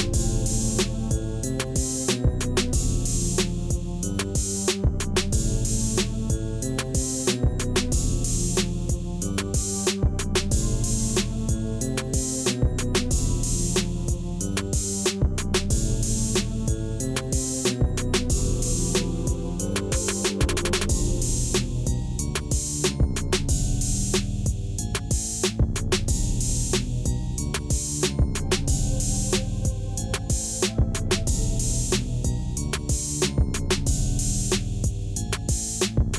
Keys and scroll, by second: 1.0 ., 1.3 9, 1.6 Return, 4.7 Tab, 5.8 a, 19.1 8, 19.4 Return, 21.5 ctrl+-, 22.6 s, 23.3 ., 23.5 2, 24.0 Return, 28.5 Tab, 34.8 1, 35.9 Return.